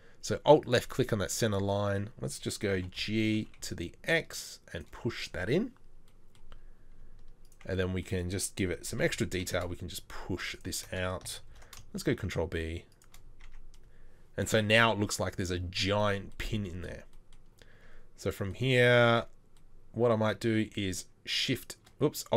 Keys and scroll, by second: 2.7 g, 8.9 g, 11.5 ctrl+b, 13.4 Tab, 17.7 Tab.